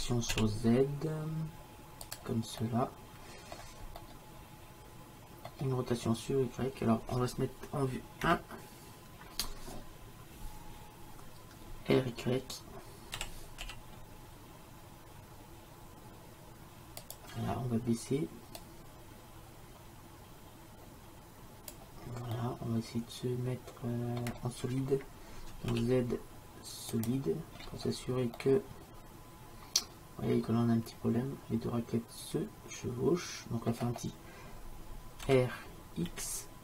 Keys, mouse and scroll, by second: 2.6-5.0 middle drag, 8.2 KP_1, 13.2 r, 18.6-20.6 drag, 22.4-24.2 middle drag, 25.7 z, 27.6-30.2 middle drag, 35.3 r.